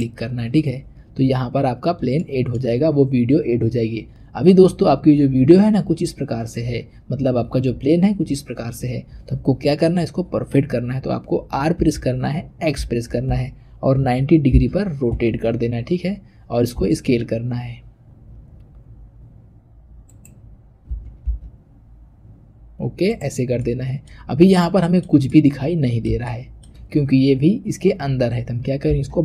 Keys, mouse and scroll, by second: 1.5-2.1 scroll up 1, 2.1-5.0 shift+middle drag, 11.7 r, 16.7 s, 20.8 s, 23.6-28.8 middle drag, 28.8 g.